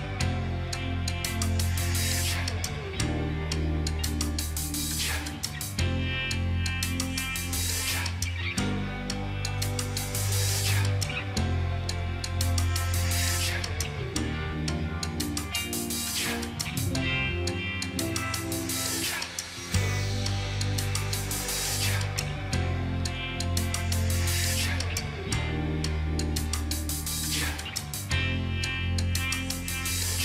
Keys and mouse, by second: 5.1 ctrl+d, 25.5 ctrl+click, 27.9 double click, 29.5 2, 29.6 2.